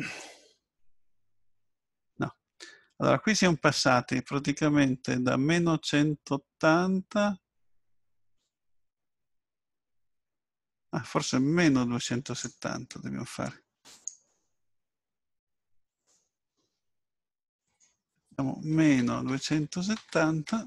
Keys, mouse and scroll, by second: 0.2 click, 13.9 click, 15.8 click, 17.6 click.